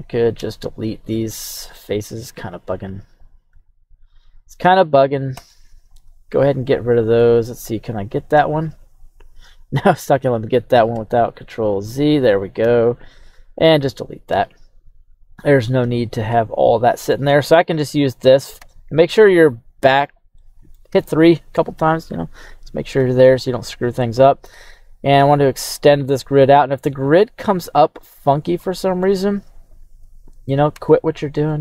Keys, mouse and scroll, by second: 0.4 x, 3.2 right click, 4.2 shift+right click, 5.3 x, 6.3 middle click, 7.9 right click, 8.4 right click, 9.4-10.9 right drag, 10.9 z, 11.7 right click, 12.6 x, 15.8 z, 16.4 middle click, 17.1 scroll up 1, 17.5-18.6 right drag, 18.6 KP_3, 20.4 middle click, 20.9 KP_3, 22.9 q, 28.6 middle click, 28.6-29.0 scroll down 1, 30.7 Tab, 31.5 middle click.